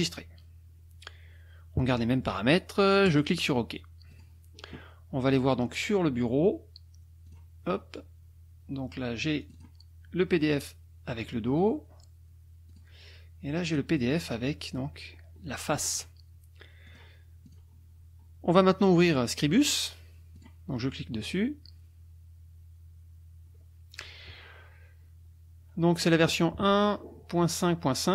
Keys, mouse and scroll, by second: 3.1 click, 4.1 click, 7.2 click, 9.4 click, 11.1-11.8 scroll down 2, 12.7 click, 13.5 click, 15.0-15.7 scroll down 4, 15.7-16.1 scroll up 2, 16.8 click, 17.5 click, 20.4 click.